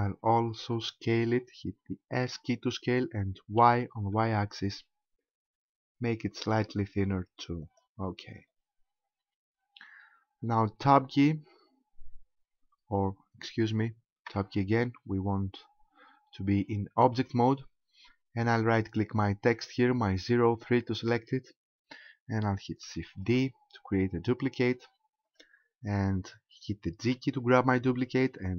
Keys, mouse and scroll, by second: 2.2 s, 7.8 ctrl+click, 8.2-9.4 scroll down 9, 10.8 Tab, 14.3 Tab, 19.5 right click, 23.2 shift+d, 25.4 right click, 27.1 g.